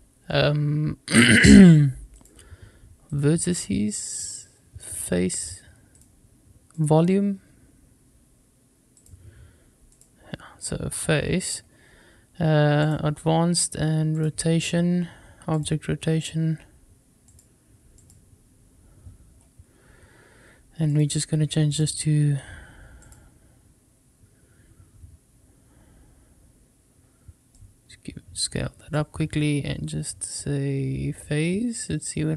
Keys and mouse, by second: 2.0 click, 4.0-4.8 drag, 5.8-6.7 drag, 8.9-9.9 drag, 12.7 click, 14.0 click, 15.4 click, 17.1 click, 17.8 click, 20.9-21.7 drag, 22.8-25.0 drag, 27.4-28.8 drag, 31.1-32.3 drag.